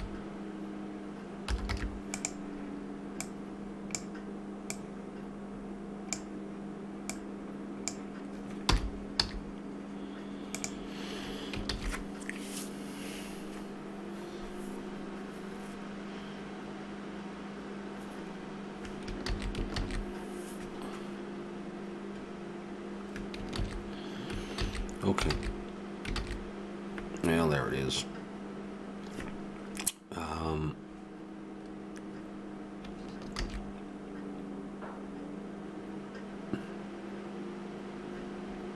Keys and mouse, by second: 3.2-6.6 drag, 7.1-9.5 drag, 8.7 r, 12.0 shift+z, 19.7 ctrl+z, 20.1 ctrl+z, 23.9 shift+z, 24.6 ctrl+z, 25.3 ctrl+z, 26.2 ctrl+z, 33.4 shift+z.